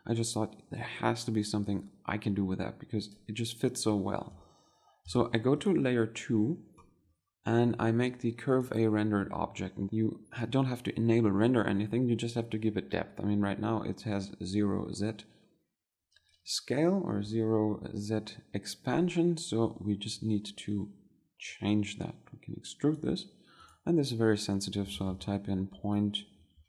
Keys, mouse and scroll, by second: 6.1 2.